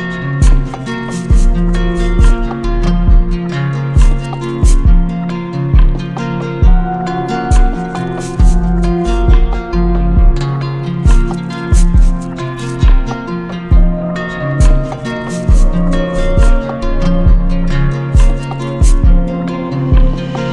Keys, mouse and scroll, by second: 1.5 z, 2.6 click, 5.6 click, 5.8 ctrl+z, 8.2 click, 12.0 click, 12.4 ctrl+z, 15.6 click, 16.2 click, 19.2 click.